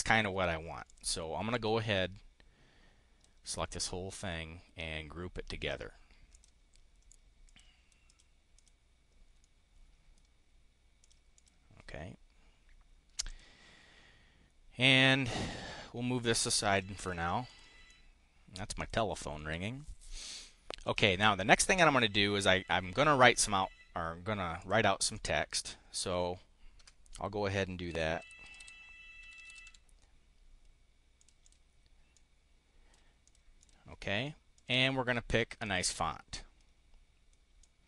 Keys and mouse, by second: 0.8 click, 1.4-3.3 drag, 5.5 click, 6.3 click, 7.3 click, 8.0 click, 8.5 click, 9.3 click, 10.9 click, 11.3 click, 13.2 click, 15.4-16.8 drag, 16.9 click, 17.4 click, 17.8 click, 18.5 click, 19.3 click, 20.7 click, 24.5 click, 25.0 click, 27.6-29.9 typing, 31.1 click, 31.3 click, 32.0 click, 33.1 click, 33.5 click, 34.4 click, 35.5 click, 37.5-37.8 drag.